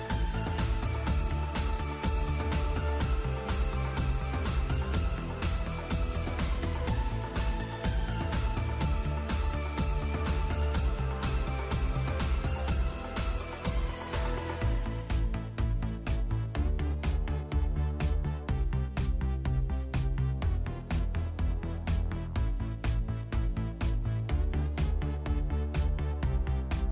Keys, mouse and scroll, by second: 0.3-1.6 scroll down 24, 0.8 middle click, 1.2 middle click, 1.6 shift+b, 2.2-2.5 scroll down 2, 3.4 a, 6.8 F3, 16.1 alt+a, 20.1 right click, 21.5 g, 24.5 right click, 25.6 g.